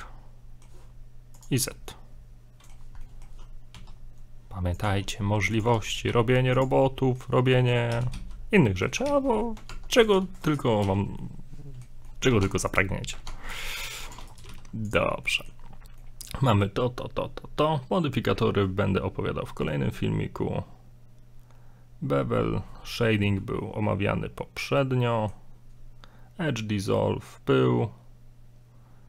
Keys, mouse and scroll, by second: 1.3 click, 1.7 click, 1.9 middle click, 3.0 middle click, 3.7 s, 4.9 g, 5.6 g, 6.8 middle click, 7.4 scroll up 2, 7.6 middle click, 8.0 e, 9.1 ctrl+z, 9.4-9.7 scroll up 3, 9.7 ctrl+Tab, 10.4 right click, 10.9 right click, 10.9 f, 11.1 scroll down 1, 11.2 middle click, 12.1 middle click, 12.4 ctrl+Tab, 13.3 ctrl+Tab, 14.3 right click, 14.5 g, 15.2 scroll down 1, 15.3 middle click, 15.8 scroll down 3, 16.0 middle click, 22.4-23.1 scroll up 2, 24.8 middle click.